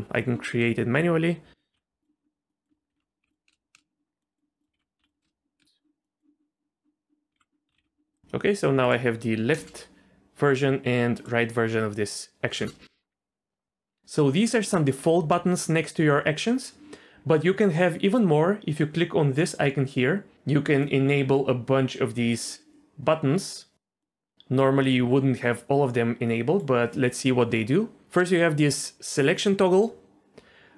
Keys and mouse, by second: 0.5 r, 2.0 i, 2.5 click, 2.9 alt+r, 3.2 i, 3.5 space, 3.7 space, 4.2 click, 4.7 alt+r, 5.0 i, 5.2 space, 5.6 space, 5.6 space, 6.0 click, 7.4 alt+r, 7.7 a, 7.8 alt+r, 8.2 space, 8.8 click, 9.5 space, 11.2 click, 12.6 space, 19.4-22.4 drag, 24.0-26.6 drag, 28.2 click.